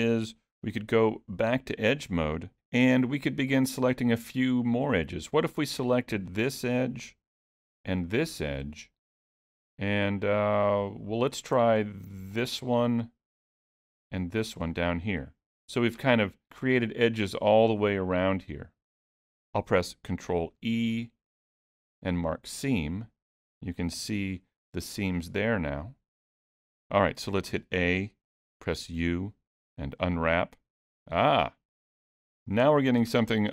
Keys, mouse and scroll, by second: 0.9 2, 2.5 alt+a, 2.9 middle click, 6.3 click, 8.0 shift+click, 9.0 middle click, 12.4 shift+click, 12.9 middle click, 14.2 shift+click, 14.8-15.4 scroll down 2, 15.1 middle click, 20.5 ctrl+e, 23.1 middle click, 24.2 alt+a, 24.5 middle click, 27.5 a, 29.0 u.